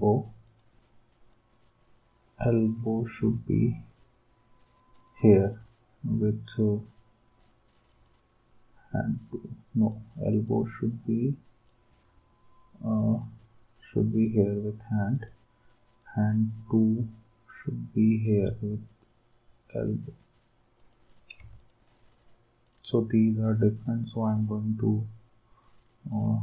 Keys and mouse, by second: 21.6 shift+click.